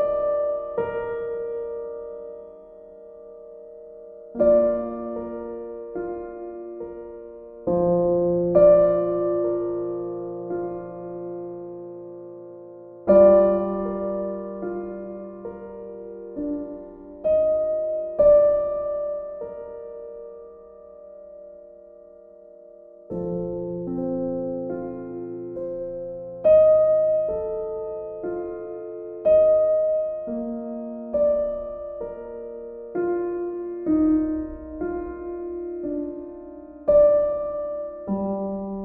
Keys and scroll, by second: 8.6 b.